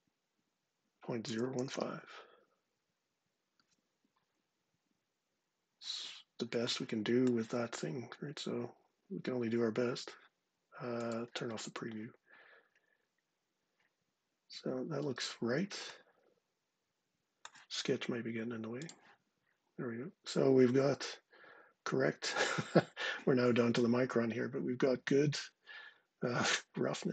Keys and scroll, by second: 0.7-1.9 typing.